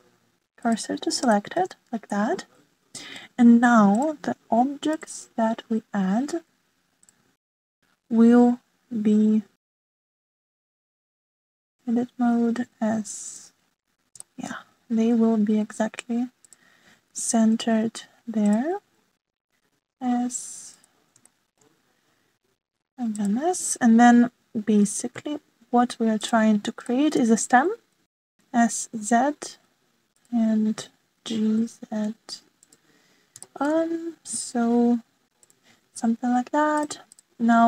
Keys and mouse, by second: 2.2-2.7 shift+middle drag, 3.1-4.1 middle drag, 5.9-8.1 drag, 9.4 s, 11.2 ctrl+z, 12.1 click, 13.6 s, 15.2 shift+middle click, 18.0 g, 20.6 s, 22.2 shift+middle click, 22.3 shift+click, 23.5 s, 25.7 g, 27.9 shift+middle click, 28.7 s, 32.1 g, 34.4 shift+click, 35.5 s.